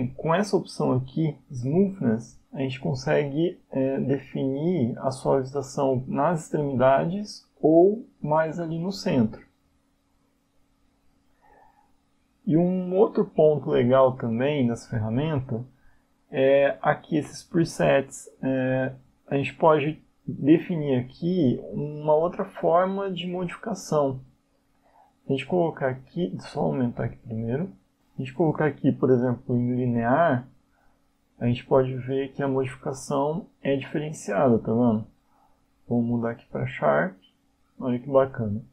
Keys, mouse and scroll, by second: 5.7 click, 16.0 click, 17.8 click, 21.9 click, 25.1 click, 27.5 click, 29.2 click, 32.7 click, 36.0 click.